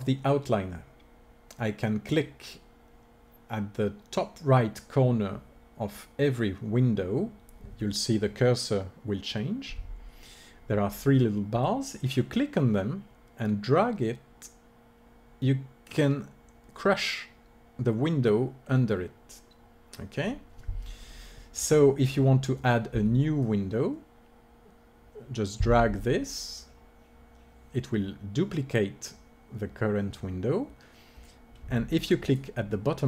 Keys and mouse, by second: 13.5 click, 23.3-25.2 drag.